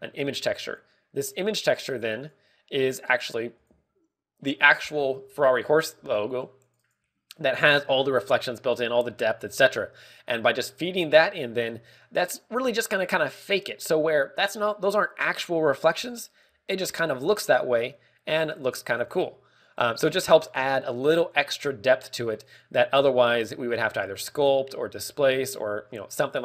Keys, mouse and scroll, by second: 0.8 g, 1.7 click, 2.1 click, 2.3 ctrl+click, 8.0 click, 9.0-9.4 scroll up 4, 9.9 click, 11.1 click, 12.7 middle click, 16.8 click, 18.0 click, 19.6 click, 20.6 click, 21.0 click, 21.2 click, 22.2 click.